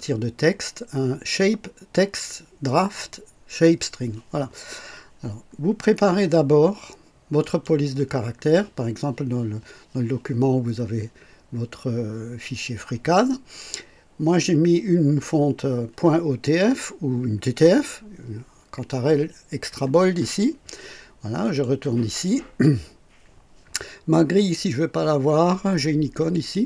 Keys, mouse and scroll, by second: 7.3 click, 21.3 click, 26.3 click.